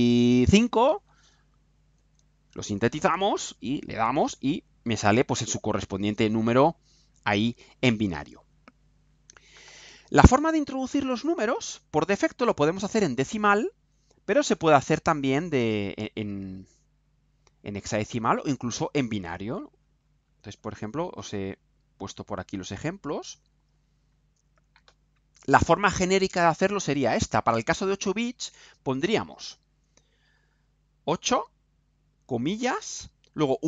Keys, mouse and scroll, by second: 0.6 5, 2.0 ctrl+u, 14.8 click, 18.2 click, 19.0-20.8 scroll down 2, 20.9-22.2 scroll down 4, 22.2-22.8 scroll down 1, 22.8-23.3 scroll down 1, 23.3-23.9 scroll down 1, 24.0 scroll down 2, 25.0 scroll down 2.